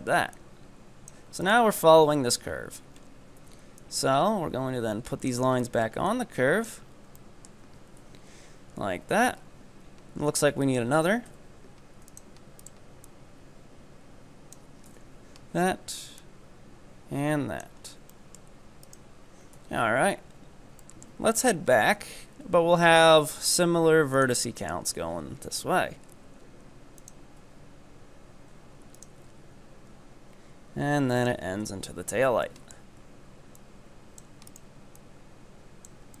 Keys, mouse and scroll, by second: 0.4-1.5 drag, 1.5 ctrl+right click, 2.3 KP_3, 3.0-3.8 scroll up 4, 3.8-5.7 drag, 5.7 right click, 6.1 click, 7.0 scroll down 3, 7.2 shift+middle click, 8.0 KP_7, 9.2 KP_3, 9.9-10.7 scroll up 1, 10.7 ctrl+right click, 11.3 w, 12.7 right click, 13.1-14.9 drag, 14.9 KP_7, 15.6 scroll up 1, 16.2-17.9 drag, 17.9 scroll down 3, 18.2-18.8 shift+middle drag, 18.8 right click, 19.3 scroll down 1, 19.6 KP_3, 20.4-20.9 scroll up 2, 20.9 shift+middle click, 21.7-22.0 scroll up 2, 22.0 e, 24.5 shift+middle click, 25.3 e, 27.5 e, 29.3 e, 31.9 KP_7, 32.5-33.6 shift+middle drag, 33.6 click, 34.5 right click, 35.1-36.2 drag.